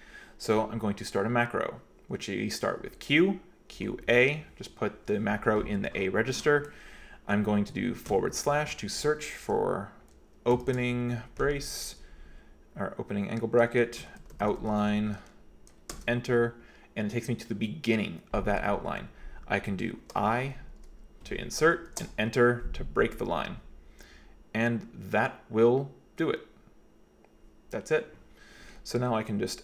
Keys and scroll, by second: 3.8 q, 4.1 a, 8.1 /, 10.6 <, 13.8-15.4 typing, 16.0 Return, 20.1 i, 21.9 Return.